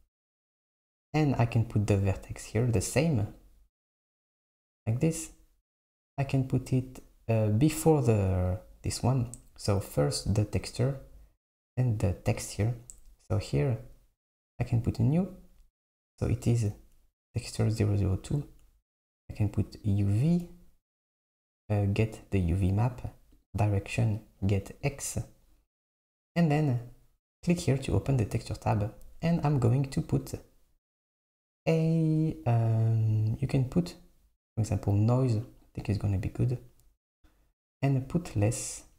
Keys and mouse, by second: 0.0 click, 2.3-5.3 drag, 6.5-8.6 drag, 14.9-18.5 drag, 19.0-26.5 drag, 28.2-33.3 drag, 38.5-38.9 drag.